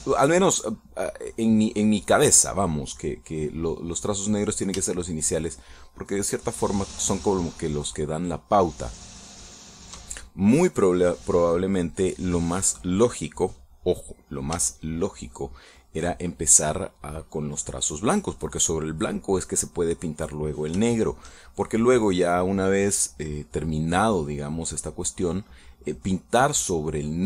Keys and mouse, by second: 5.9 shift+middle click, 8.1-9.2 shift+middle drag, 15.8 shift+middle click, 22.0-23.1 shift+middle drag, 26.0-27.2 drag.